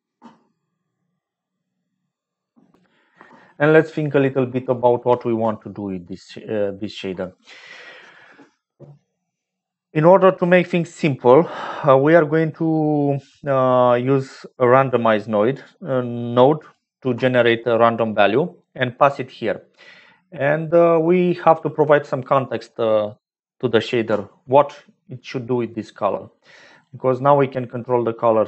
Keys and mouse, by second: 6.1 middle click, 6.2 click, 6.4 middle click, 6.5 click, 6.7 middle click, 14.4 click, 16.0 click, 21.3 middle click, 24.4 click.